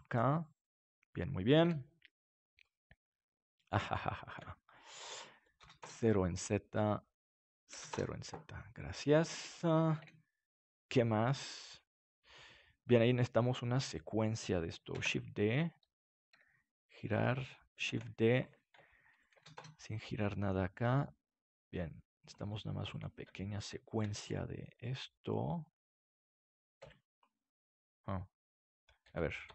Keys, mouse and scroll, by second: 0.2-1.7 middle drag, 1.6 KP_7, 2.6 middle click, 4.0-9.1 right drag, 5.4-9.3 drag, 8.9-9.9 middle drag, 9.9 KP_7, 12.1-13.5 drag, 13.5 right click, 14.9 shift+d, 16.0-17.8 drag, 16.3 r, 17.8 shift+d, 20.8 g, 22.2-24.2 drag, 22.9-24.8 right drag, 24.0 shift+d, 27.7-29.5 right drag.